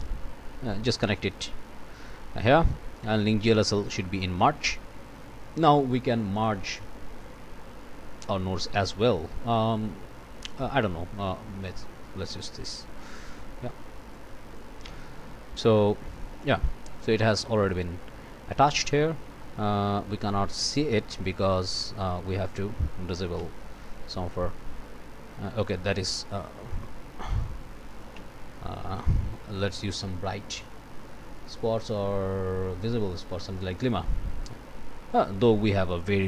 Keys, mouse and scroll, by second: 0.7 click, 2.0 click, 3.0-4.4 drag, 4.6 click, 6.4-7.4 drag, 8.7 scroll down 1, 10.2 scroll up 1, 11.8-12.8 drag, 14.1 click, 15.8-17.2 drag, 17.3 click, 22.4 click, 23.4 d, 24.7 scroll up 1, 25.7 scroll down 1, 26.0 d, 26.8 click, 27.9 click, 28.1 d, 28.9 click, 29.6 Delete, 32.8 scroll up 1, 33.6-34.6 drag, 35.5 click, 36.0 click.